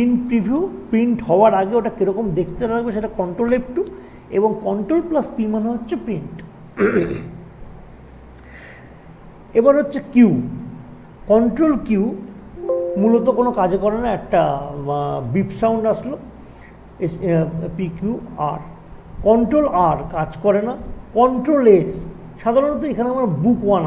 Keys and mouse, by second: 1.6 typing, 11.9 typing, 12.3 ctrl+q, 21.7 click, 21.7 typing.